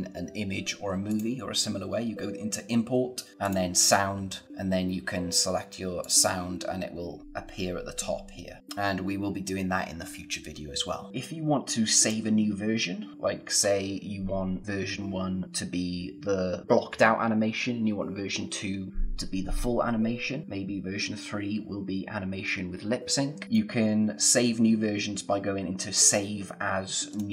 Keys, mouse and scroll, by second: 1.0 click, 3.4 click, 5.9 click, 11.1 click, 23.4 click, 27.1 click.